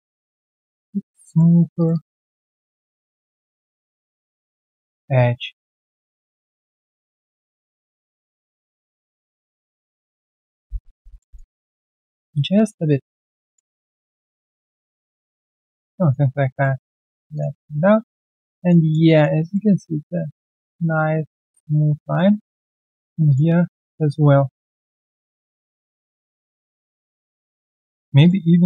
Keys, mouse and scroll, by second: 0.0 alt+middle click, 0.9 alt+right click, 1.2 alt+middle click, 1.7 shift+click, 1.9 shift+double click, 2.2 alt+middle click, 5.1 alt+middle click, 6.5 shift+click, 7.7 alt+middle click, 9.1 alt+middle click, 9.7 alt+scroll down 1, 9.9 alt+middle click, 10.6 alt+scroll down 1, 10.8 r, 11.1 alt+middle click, 12.8 alt+middle click, 12.8 alt+right click, 13.1 alt+middle click, 13.4 alt+right click, 13.8 alt+middle click, 15.6 alt+click, 15.9 alt+middle click, 17.5 alt+click, 18.5 alt+middle click, 18.8 alt+click, 19.0 alt+middle click, 19.4 alt+click, 19.7 alt+middle click, 20.0 alt+click, 20.9 alt+click, 22.3-22.8 alt+scroll down 1, 22.8 alt+click, 23.6 alt+click, 24.8 shift+click, 25.2 alt+click, 27.2 alt+middle click, 27.6 alt+right click, 27.8 alt+click.